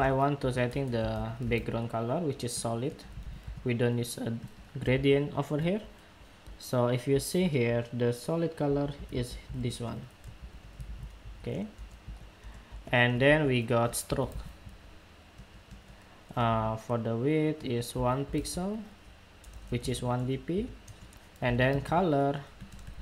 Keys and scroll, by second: 4.6 super+Tab, 8.8 super+c, 9.2 super+Tab, 10.6 super+v, 11.9 super+v.